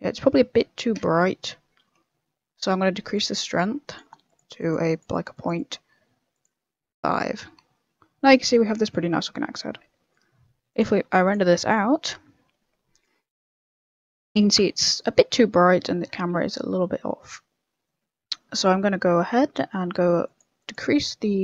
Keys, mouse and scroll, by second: 1.1 Delete, 3.1-5.1 click, 5.3 click, 5.5 click, 6.3 click, 10.1 z, 10.6 click, 16.6 ctrl+middle click, 17.2 shift+middle click, 20.2 click.